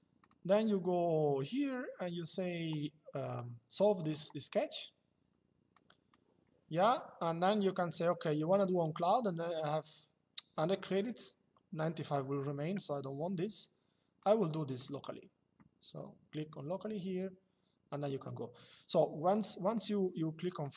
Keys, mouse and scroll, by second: 3.7 click, 5.4 click, 13.9 click, 19.0 click.